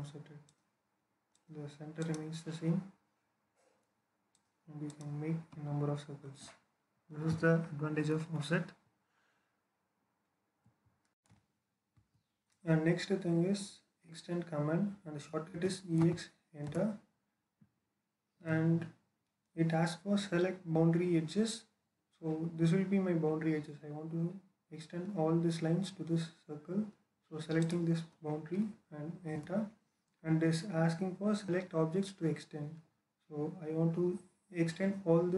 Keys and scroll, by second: 5.3 Escape, 5.4 typing, 15.4-15.9 typing, 16.5 alt+space, 29.2 space.